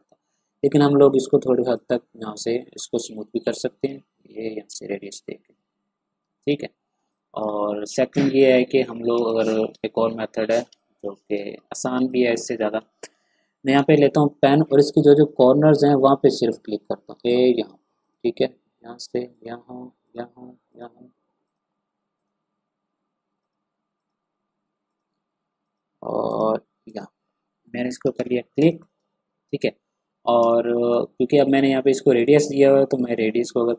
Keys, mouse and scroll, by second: 0.5 ctrl+scroll up 1, 1.7-7.0 drag, 7.1 ctrl+click, 7.4 ctrl+scroll down 1, 8.6 ctrl+scroll down 1, 9.1 ctrl+space, 9.2 click, 9.7 space, 9.8-10.1 ctrl+scroll up 1, 10.7 ctrl+space, 10.7 click, 11.2 space, 11.8 ctrl+scroll down 1, 12.0 ctrl+space, 12.1 click, 12.5 space, 13.2 p, 14.3 click, 27.7 v, 28.1 ctrl+scroll down 1, 28.6 space, 28.6 click, 29.8-30.1 ctrl+scroll up 1, 30.4 space, 30.4 click, 30.9 space, 32.4-33.7 drag.